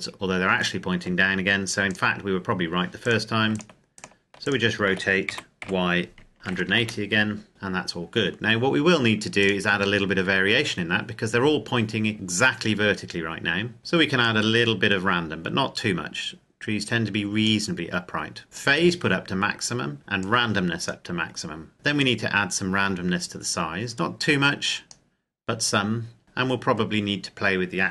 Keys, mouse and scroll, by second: 1.7 click, 2.9 right click, 5.1 r, 5.4 y, 6.1 KP_1, 6.2 KP_8, 6.6 KP_Enter, 7.5-8.0 scroll up 1, 8.0 scroll down 1, 9.2 right click, 10.4-12.1 scroll down 1, 14.1 click, 18.6 click, 20.3 click, 21.7 scroll down 1, 21.8 click.